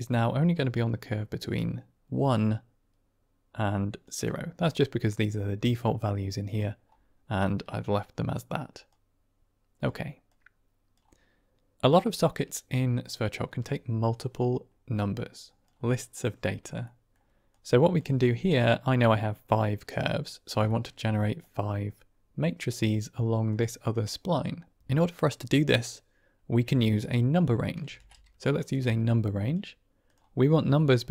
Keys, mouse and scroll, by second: 4.5-6.4 drag, 7.8-8.4 drag, 9.0 click, 10.2 click, 12.0-15.6 drag, 16.8 middle click, 17.5 click, 18.4 middle click, 20.7 middle click, 21.3-23.4 drag, 27.8 shift+a, 30.8 middle click.